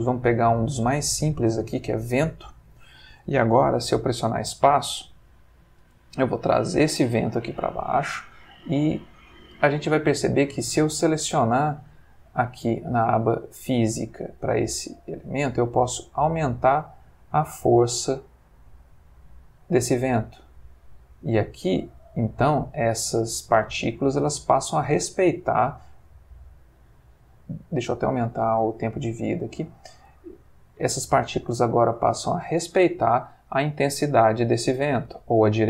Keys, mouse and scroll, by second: 1.8 click, 4.2 space, 5.8 g, 6.7 click, 11.4 click, 15.7-17.0 drag, 17.9 click, 19.4 click, 20.7 click, 22.8 click, 23.9 click, 24.6 click, 26.6 click, 28.2-29.7 drag, 30.1 click, 30.9 click, 31.9 click, 33.2 click, 33.9 g, 34.9 click, 35.2 r.